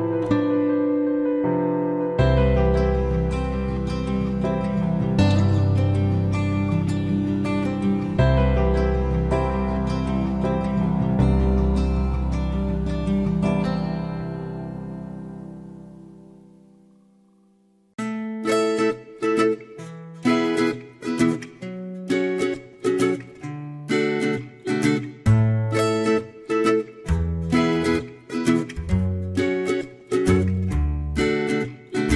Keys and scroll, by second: 18.3 ctrl+x, 19.4 ctrl+f.